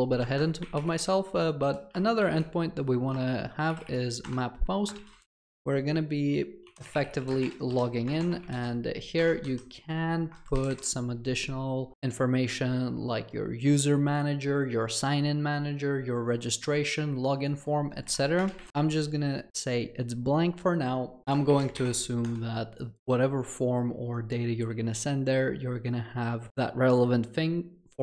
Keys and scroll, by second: 1.4 Return, 9.2 Escape, 22.4 Return.